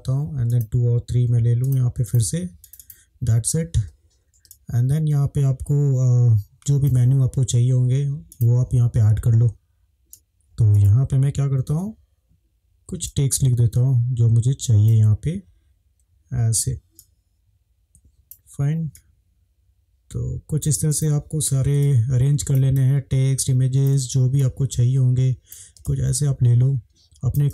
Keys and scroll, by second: 4.6 space, 10.1 ctrl+c, 11.6 ctrl+v, 21.8 space.